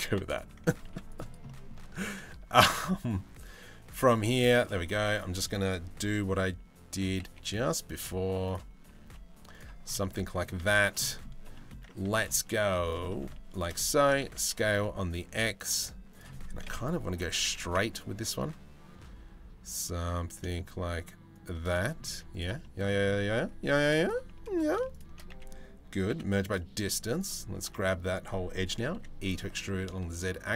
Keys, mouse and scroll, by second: 0.4 ctrl+r, 1.0 middle click, 3.7 ctrl+r, 4.5 1, 6.7 g, 8.1 click, 8.4 g, 9.6 middle click, 10.2 z, 10.6 middle click, 11.1 middle click, 11.6 2, 12.2 z, 12.7 shift+middle click, 13.1 shift+click, 13.6 s, 16.2 KP_7, 16.8 s, 21.3 shift+middle click, 21.7 z, 22.2 middle click, 23.2 2, 24.9 a, 25.7 m, 28.5 e.